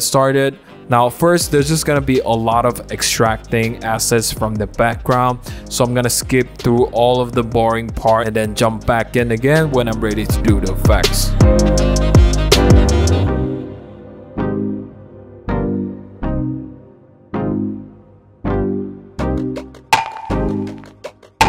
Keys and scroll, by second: 11.4-14.9 typing, 12.5 super+1, 14.0 super+=, 15.4 super+z, 19.9 super+0, 20.2 super+=, 21.1 super+0, 21.1 v, 21.3 super+a, 21.3 v.